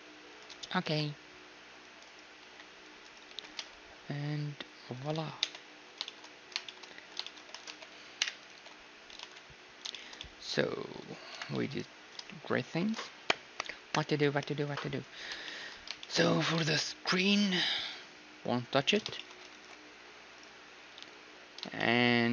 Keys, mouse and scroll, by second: 0.6 z, 0.9 c, 2.5-4.1 right drag, 2.5 c, 3.0-5.0 drag, 3.3 g, 5.1 z, 5.5 Tab, 5.6-7.3 middle drag, 7.0 z, 7.7 alt+h, 8.2 KP_Divide, 8.6 alt+h, 9.2 ctrl+s, 11.3-14.0 middle drag, 11.3 KP_1, 11.5 z, 15.5 middle click, 16.4 z, 17.3-19.5 middle drag, 19.5 ctrl+s, 20.4-22.3 right drag, 21.1 z, 21.8-22.3 middle drag.